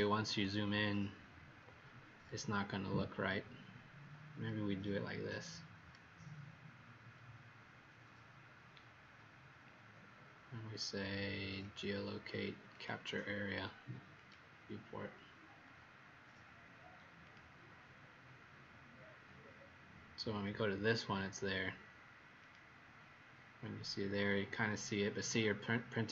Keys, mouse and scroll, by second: 2.7-3.2 scroll up 3, 4.7 scroll up 1, 6.4 middle click, 9.0 scroll down 1, 11.6 click, 26.0-26.1 scroll up 2.